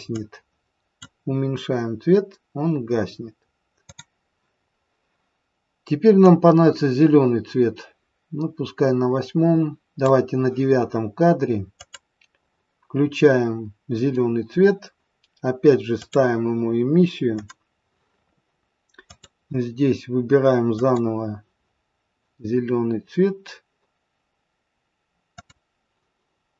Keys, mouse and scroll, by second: 0.1 click, 3.8 click, 6.2 click, 11.8 click, 16.0 click, 25.4 click.